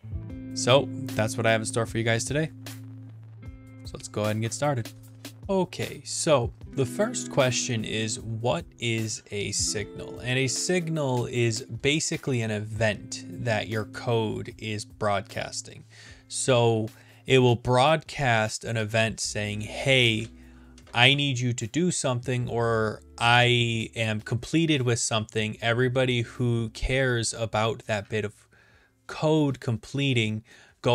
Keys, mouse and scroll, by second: 0.0-0.9 drag, 1.0 click, 6.0 click, 8.3-9.1 scroll, 9.1-9.9 scroll, 10.6-11.6 scroll, 11.6-12.3 scroll, 12.3-13.4 scroll.